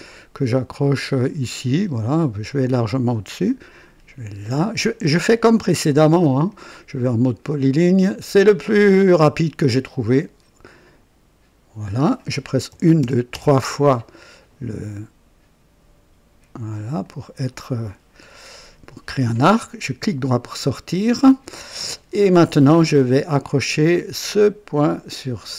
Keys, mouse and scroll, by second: 1.2 click, 4.4 click, 6.4 click, 9.0 click, 11.8 click, 12.7-13.3 typing, 17.0 click, 19.9 right click, 22.6 right click, 24.2 click.